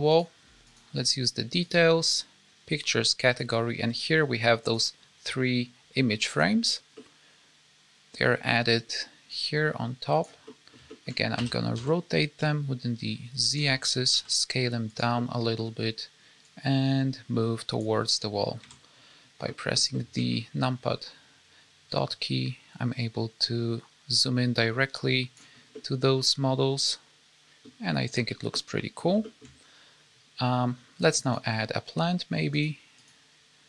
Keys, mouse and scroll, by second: 0.1 click, 0.6 click, 1.7 click, 3.3 click, 6.2 click, 6.9 middle click, 9.2 click, 10.4 middle click, 10.8 shift+middle click, 11.3 r, 14.0 s, 15.1 middle click, 16.4 click, 18.6 KP_Decimal, 19.4 middle click, 19.9 shift+middle click, 20.2-21.3 scroll up 3, 21.8 click, 25.6-26.9 scroll down 3, 25.7 middle click, 27.9-28.4 scroll down 2, 28.4 middle click, 29.2 shift+middle click, 31.2 click, 32.9 click.